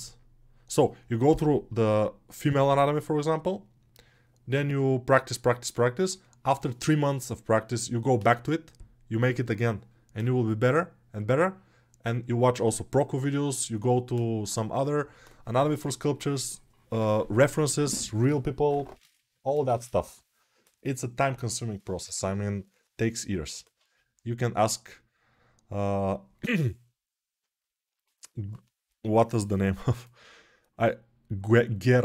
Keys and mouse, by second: 19.4-32.0 drag.